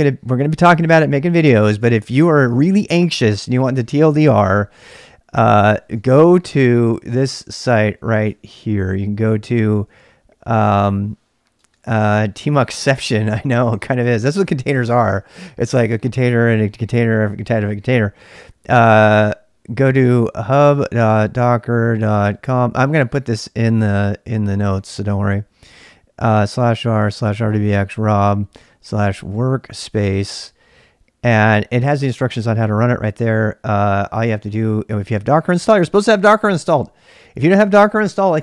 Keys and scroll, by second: 5.4-10.3 typing, 11.5-14.2 typing, 16.0-16.7 typing, 19.6-22.9 typing, 25.9-30.7 typing, 33.3-36.1 typing.